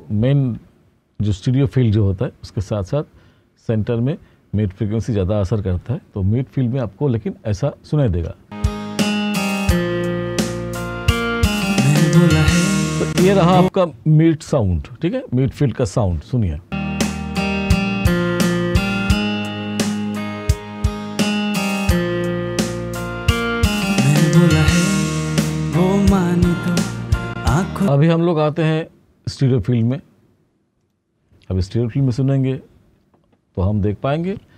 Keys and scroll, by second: 8.0 space, 13.0 space, 16.0 space, 22.5-23.4 typing, 27.2 space, 28.6-30.6 typing, 34.2 space.